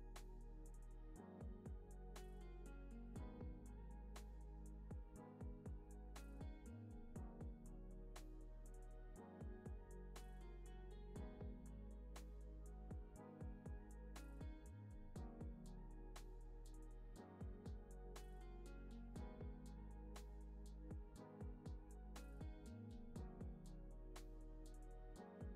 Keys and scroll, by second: 1.3 u, 2.7 u, 4.2 x, 7.5 super+s, 10.7 u, 11.9 super+s.